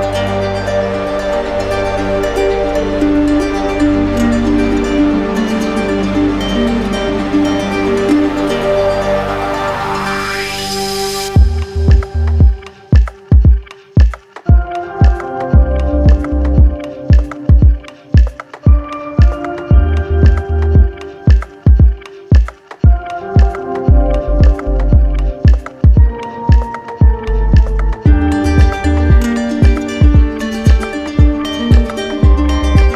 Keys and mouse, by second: 1.1-2.2 shift+right drag, 2.4-3.8 right drag, 4.6-6.5 right drag, 7.0-8.3 alt+right drag, 10.8-14.6 right drag, 16.3-17.4 drag, 19.4-20.5 drag, 21.2 right click, 23.7 right click, 24.7 ctrl+d, 27.1 ctrl+d, 30.9 alt+right click, 32.1 alt+click.